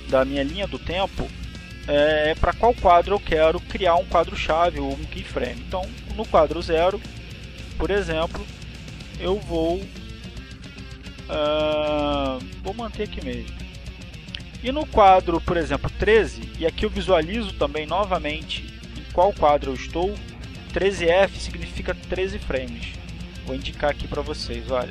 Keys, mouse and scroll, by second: 0.4-9.6 drag, 10.6 click, 12.0 click, 12.9 click, 13.8 click, 14.6 click, 15.2 click, 15.8 click, 16.4 click, 17.6-18.9 drag.